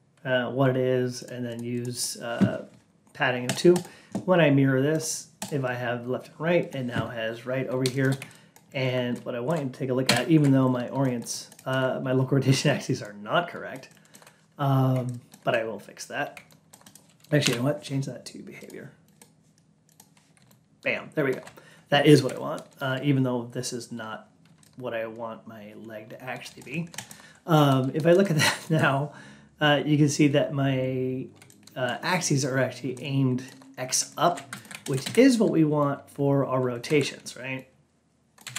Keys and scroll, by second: 17.3 Delete.